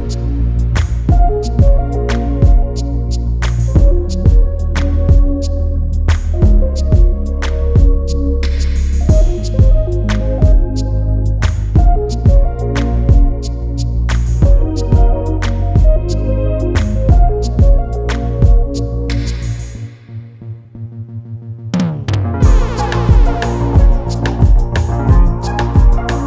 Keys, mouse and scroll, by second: 5.6 click, 18.8 scroll up 1, 19.0 click, 19.4-19.7 scroll down 1, 19.7 click, 26.0 ctrl+g.